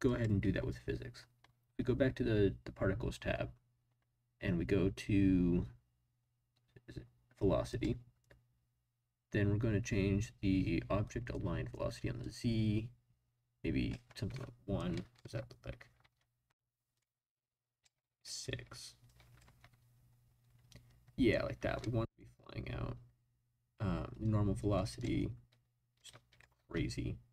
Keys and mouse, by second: 0.0 click, 7.7 click, 12.2-13.9 drag, 14.8-15.1 drag, 15.2 space, 16.0 space, 16.9 click, 19.1 click, 19.4 space, 21.6 space, 21.8-22.2 drag, 24.2 click, 26.0 click, 26.6 space.